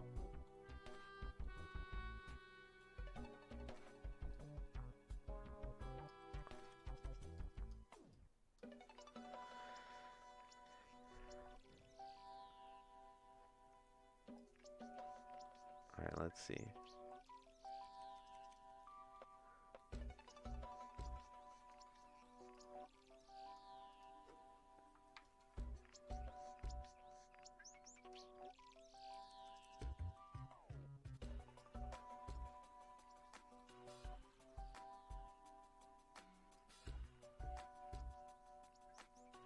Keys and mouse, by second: 0.2 middle click, 1.4 middle click, 4.3-6.1 drag, 6.9 middle click, 7.3 click, 14.3 click, 15.2 middle click, 16.4 click, 17.6 click, 18.8 middle click, 19.8 middle click, 21.0-22.6 drag, 23.2 click, 25.2 ctrl+right click, 26.0 middle click, 33.5 middle click, 36.5-37.9 drag.